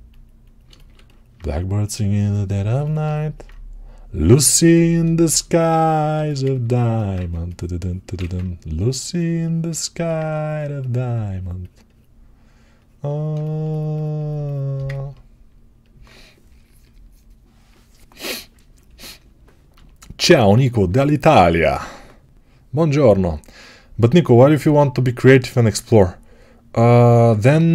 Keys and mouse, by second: 7.0-27.7 right drag, 7.0 2, 8.1 alt+q.